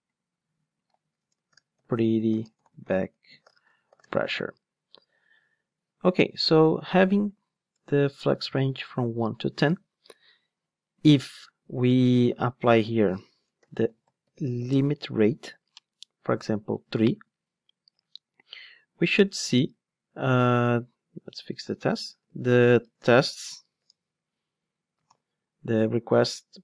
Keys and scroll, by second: 14.7 Return, 25.1 alt+super+l.